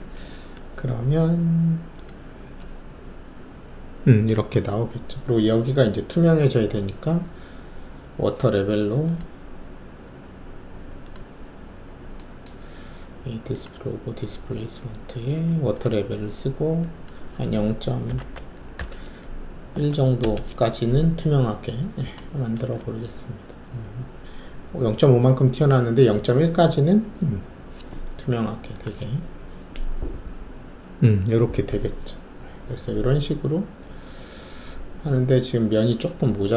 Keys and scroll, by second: 0.2 alt+shift+F1, 18.0 0, 18.8 ., 19.7 1, 20.2 Return, 22.5 shift+F1.